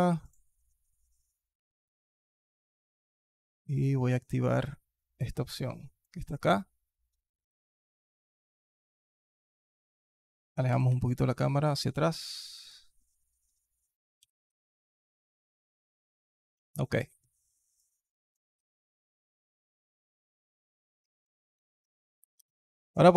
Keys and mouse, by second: 0.0 click, 3.5 click, 5.3 click, 9.7 click, 10.5 g, 14.0 g, 16.5 alt+click, 17.0-17.3 alt+drag, 17.6-18.1 alt+drag, 19.4-20.7 alt+drag, 22.0 alt+drag, 22.5 alt+drag.